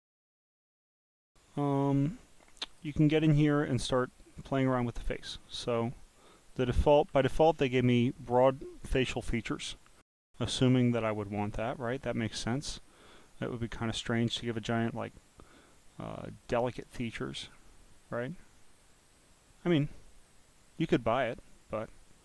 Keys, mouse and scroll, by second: 1.7-2.8 drag, 3.2 scroll, 3.9 scroll, 4.4-4.9 scroll, 4.9 scroll down 4, 16.6 click, 17.4 click, 18.3 click.